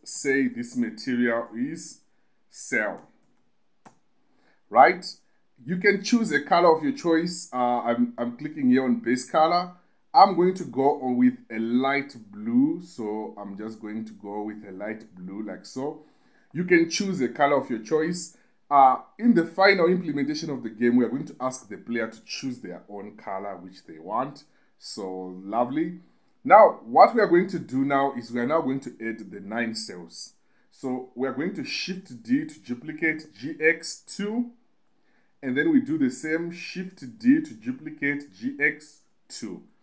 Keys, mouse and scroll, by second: 2.4 e, 3.7 l, 5.7 click, 9.3 click, 11.5 click, 28.2 click, 32.2 shift+d, 33.5 g, 33.7 x, 34.4 2, 35.1 click, 37.6 shift+d, 38.5 g, 38.9 x, 39.4 2.